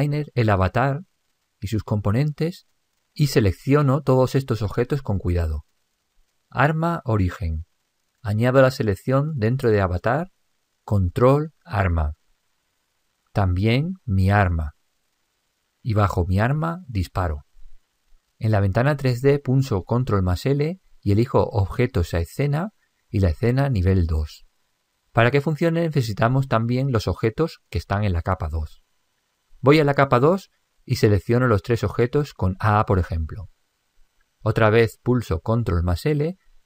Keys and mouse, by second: 3.1 click, 6.7 click, 9.6 click, 12.9 click, 15.4 click, 17.3 click, 19.1 click, 20.6 ctrl+l, 30.2 click, 31.9-34.0 middle drag, 33.2 a, 35.2 ctrl+l.